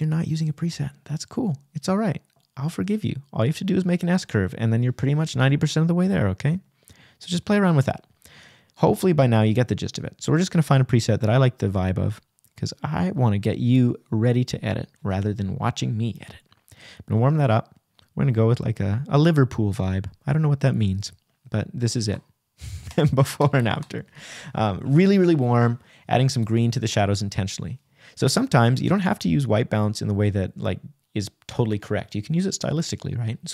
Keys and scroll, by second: 14.6 \, 29.9 Return, 30.5 \.